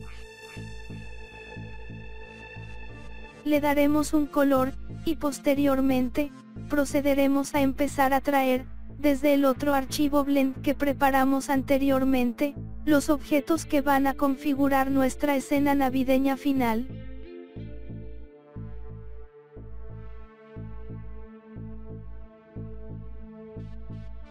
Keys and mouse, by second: 0.4 click, 1.2 click, 2.1 click, 2.9 click, 3.7-4.8 drag, 5.8 click, 7.6 click, 8.2-9.7 drag, 9.8 click, 10.7 click, 11.4-12.9 drag, 13.2 click, 14.1-15.1 drag, 15.5 click, 16.8 click, 18.3 click, 19.0-20.0 drag, 20.5 click, 21.2 click, 21.9 click, 23.0 click, 23.9 click.